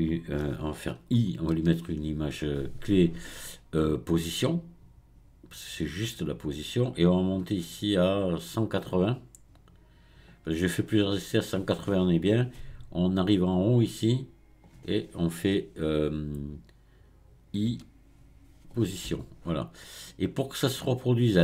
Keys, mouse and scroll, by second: 7.4-10.4 drag, 13.3-16.4 drag, 21.0-21.4 drag.